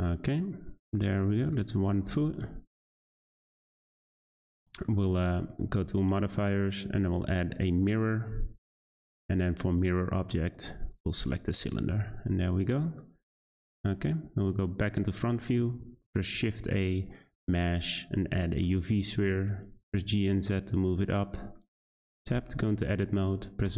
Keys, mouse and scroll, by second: 1.6 click, 1.8 Tab, 2.0 a, 2.1 s, 3.9 Tab, 4.3-6.3 shift+middle drag, 8.1-9.3 drag, 9.8 click, 10.9 click, 11.3-13.0 middle drag, 13.0-13.4 shift+scroll down 1, 13.4 middle click, 13.5 `, 15.8 shift+a, 18.6-19.8 shift+middle drag, 19.8 g, 21.6-22.2 shift+middle drag, 22.2 Tab, 23.6 1.